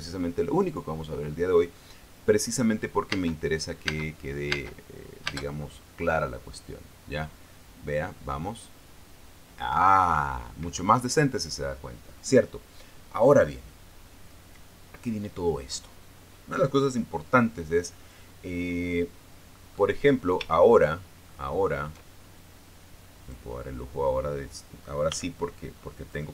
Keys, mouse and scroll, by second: 3.8 space, 4.5 space, 5.2 space, 5.9 space, 11.4 Escape, 20.2 middle click, 20.7-21.2 scroll down 3, 21.6 shift+middle click, 22.0 shift+middle click, 24.0 click, 25.8 b.